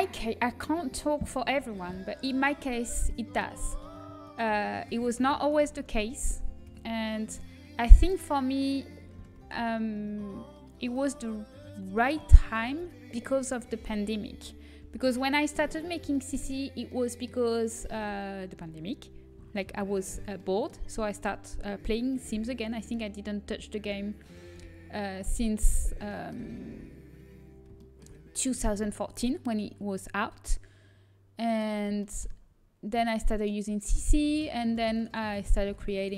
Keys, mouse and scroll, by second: 4.1 Tab, 6.6 KP_1, 8.2 s, 11.8-13.6 right drag, 12.8 g, 14.6 Tab, 14.6 a, 16.1 middle click, 18.5 Tab, 19.5 shift+c, 22.7 l, 23.4 l, 24.4 l, 25.1-26.9 middle drag, 26.9 a, 27.7 middle click, 27.8-29.8 drag, 31.6-34.5 right drag, 34.5-36.1 middle drag, 35.4 ctrl+z.